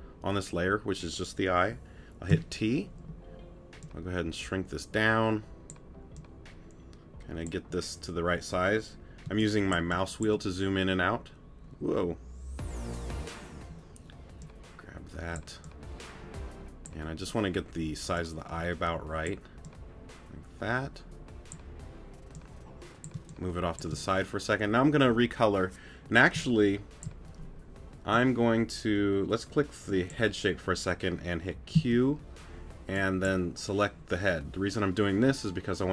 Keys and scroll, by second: 2.3 t, 9.2 space, 23.1 space, 26.3 space, 31.7 q.